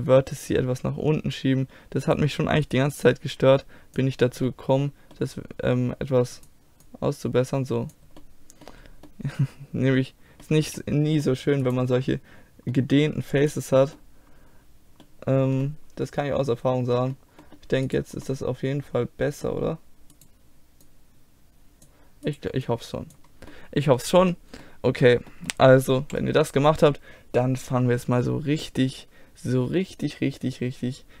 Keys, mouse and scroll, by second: 0.4-2.0 middle drag, 0.4-2.0 scroll up 1, 2.0 click, 2.7-4.5 right drag, 3.1-4.5 drag, 4.5 middle click, 6.9-8.2 drag, 6.9-8.2 right drag, 8.2 middle click, 11.7 right click, 12.2-15.5 middle drag, 17.9-19.8 middle drag, 20.2-21.9 middle drag, 20.9 click, 20.9 right click, 23.4-24.5 middle drag, 24.9 a, 26.1 z, 28.7-31.2 middle drag.